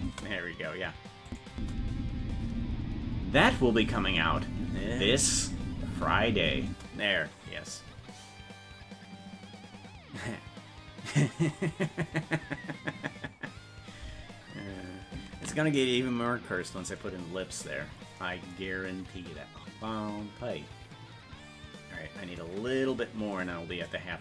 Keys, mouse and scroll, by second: 1.3 click, 1.5 space, 6.7 space, 13.9-14.2 scroll down 1, 15.1 scroll down 2, 15.7 ctrl+s.